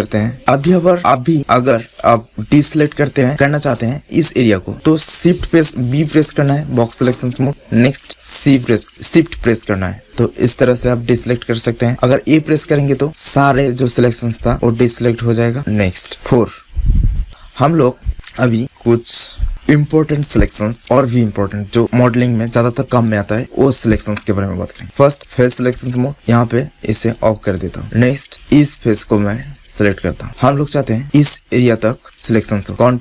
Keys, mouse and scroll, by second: 0.3 ctrl+z, 0.3 b, 6.2 b, 16.1-18.5 middle drag, 19.4-20.8 middle drag, 20.9-25.5 middle drag, 25.9-28.2 drag, 28.2-29.3 middle drag, 29.3 click, 30.2 middle click.